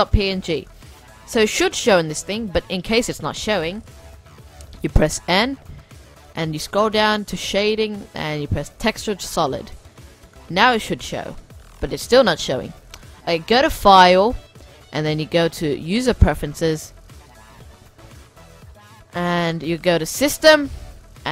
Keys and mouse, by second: 0.0-1.7 drag, 0.8 middle click, 1.7-4.8 middle drag, 4.8 n, 5.6-6.4 middle drag, 7.4-10.4 drag, 9.7 n, 10.4-12.8 middle drag, 12.8-14.6 drag.